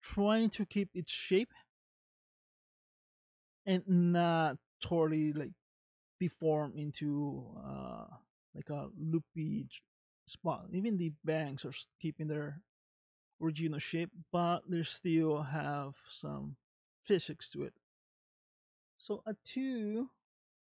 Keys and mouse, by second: 1.4 shift+middle click, 2.2 middle click, 3.8 middle click, 5.8 shift+middle click, 6.6-7.7 middle drag, 8.7-10.3 middle drag, 11.1 middle click, 13.9 space, 18.0 space.